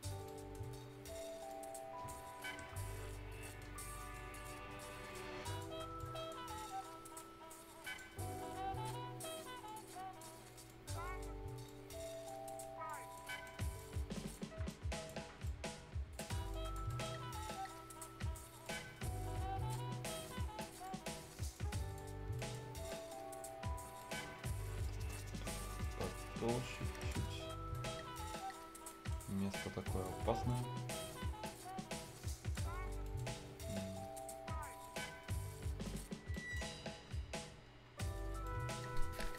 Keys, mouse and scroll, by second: 0.2 ctrl+right click, 0.8 ctrl+scroll up 1, 1.5 ctrl+click, 2.2-2.5 ctrl+scroll down 1, 2.6 ctrl+Tab, 2.9 ctrl+scroll up 1, 3.4 ctrl+right click, 3.6 ctrl+scroll down 1, 3.8 ctrl+scroll up 1, 4.1-6.5 ctrl+drag, 6.5 ctrl+right click, 7.1 ctrl+click, 8.1-8.8 ctrl+scroll up 1, 8.8-10.4 ctrl+drag, 10.4 ctrl+scroll up 1, 10.6 ctrl+click, 11.0 ctrl+right click, 11.6 ctrl+click, 12.4 ctrl+right click, 12.8 ctrl+click, 13.3 ctrl+right click, 13.7-16.5 ctrl+drag, 16.8 ctrl+right click, 18.6 ctrl+click, 19.9 ctrl+scroll down 1, 20.2 ctrl+right click, 20.8 ctrl+click, 22.2-22.8 ctrl+scroll down 2, 22.3 ctrl+right click, 22.8 ctrl+right click, 23.2 ctrl+scroll up 1, 23.8 ctrl+scroll down 1, 24.0 ctrl+right click, 24.3-24.8 ctrl+scroll up 1, 24.8-27.2 ctrl+drag, 27.2 ctrl+scroll down 1, 27.7 ctrl+right click, 28.2 ctrl+scroll down 1, 28.4 ctrl+scroll up 1, 28.9 ctrl+right click, 29.2 ctrl+scroll up 1, 29.5 ctrl+click, 30.1 ctrl+scroll down 1, 30.3 ctrl+right click, 30.6 ctrl+scroll up 1, 31.5-32.8 ctrl+drag, 32.8 ctrl+scroll up 1, 33.0 ctrl+right click, 33.2 ctrl+scroll down 1, 33.4 ctrl+scroll up 1, 33.7 ctrl+click, 34.2-34.8 ctrl+scroll up 1, 34.8 ctrl+click, 36.1-36.8 ctrl+scroll down 2, 36.3 ctrl+right click, 36.8 ctrl+scroll up 1, 38.4 ctrl+right click.